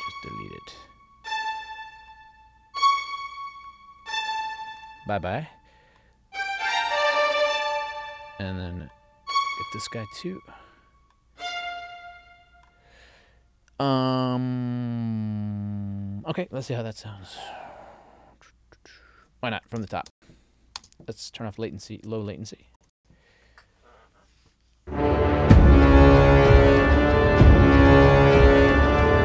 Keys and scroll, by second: 20.1 space, 22.7 ctrl+alt+l, 22.9 space.